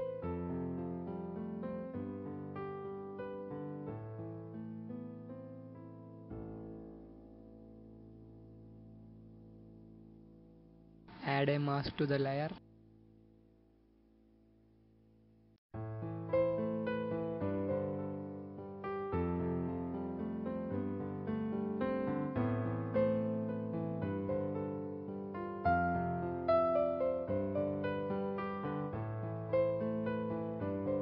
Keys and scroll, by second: 14.7 b, 21.2-21.7 typing, 28.2-28.6 typing, 29.9 typing.